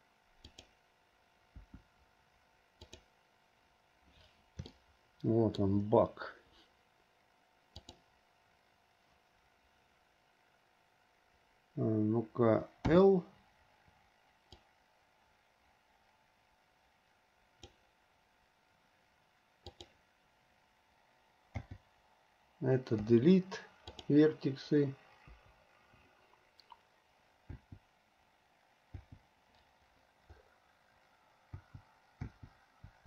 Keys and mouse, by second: 1.0 `, 1.8 `, 5.0-6.0 shift+middle drag, 13.1 l, 14.7 click, 15.1-17.9 drag, 19.9 click, 21.8 l, 23.1 Delete, 25.4 Delete, 27.8 l, 29.2 l, 31.8 l, 32.5 l.